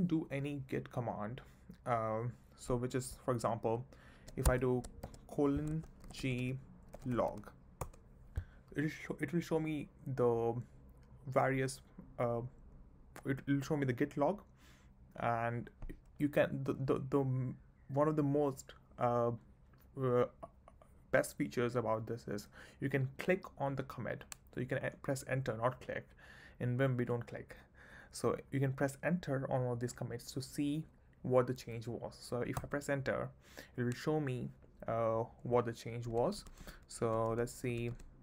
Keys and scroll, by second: 4.5 Escape, 5.0 shift+;, 6.0-7.8 typing, 7.8 Return, 32.6 Return, 36.1 ctrl+d.